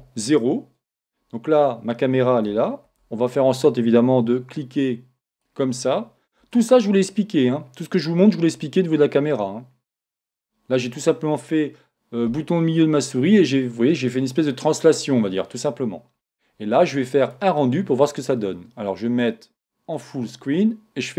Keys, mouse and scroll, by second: 2.9 shift+z, 5.3-7.5 right drag, 6.4 g, 10.2 click, 17.2 click, 19.2 click, 21.1 click.